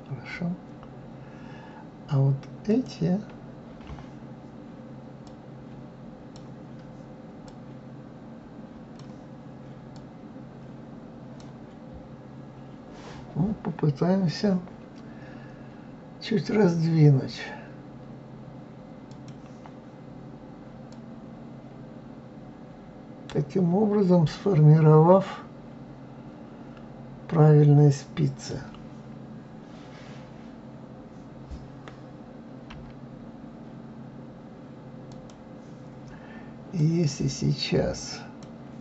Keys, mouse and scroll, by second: 2.7 click, 5.2-12.9 drag, 19.1 click, 20.9-23.9 drag, 32.7 s, 36.7-38.8 drag.